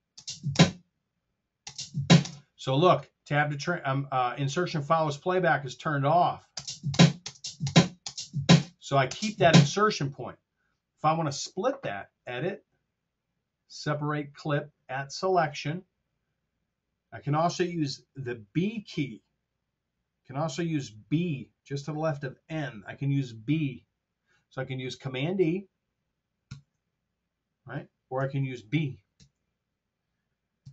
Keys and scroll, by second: 0.1 space, 1.6 space, 6.4 space, 26.5 super+e, 28.2 super+z, 29.0 b.